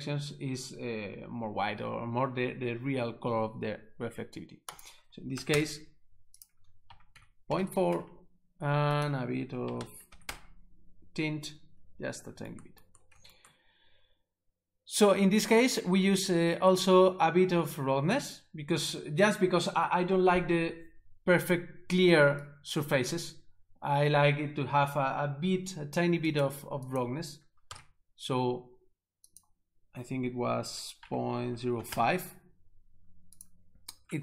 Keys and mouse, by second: 4.7 click, 5.3 1, 5.5 Return, 6.4 click, 6.9 ., 7.1 3, 7.5 BackSpace, 7.6 4, 7.9 Return, 9.0 click, 9.6 ., 9.8 2, 10.1 5, 10.2 Return, 22.5 click, 26.3 click, 26.9 click, 27.7 ctrl+z, 29.3 click, 31.0 ., 31.5 0, 31.8 5, 31.9 Return, 33.4 click.